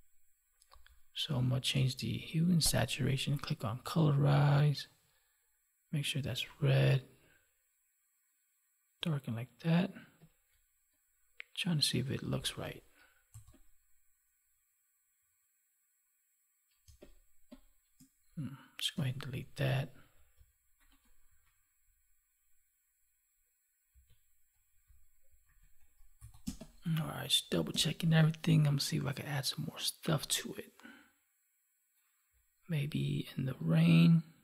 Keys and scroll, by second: 1.6 ctrl+alt+u, 16.7 space, 18.9 Delete, 19.5 ctrl+s, 23.8 ctrl+z, 25.4 ctrl+1, 26.3 space.